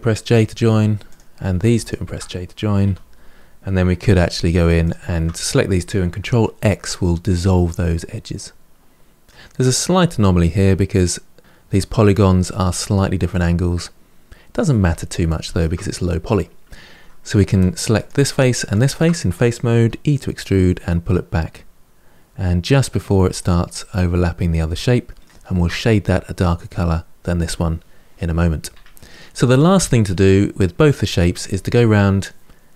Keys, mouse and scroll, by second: 0.1 j, 0.9 click, 1.6 shift+click, 2.6 j, 3.8 2, 3.9 click, 4.6 shift+click, 6.4 ctrl+x, 7.5-9.5 middle drag, 13.1-14.5 middle drag, 14.5 Tab, 15.1 shift+middle click, 15.8-17.3 scroll up 2, 17.3 3, 17.7 click, 18.5 shift+click, 19.5 e, 23.6-26.6 middle drag, 28.5 Tab, 28.9-31.7 middle drag.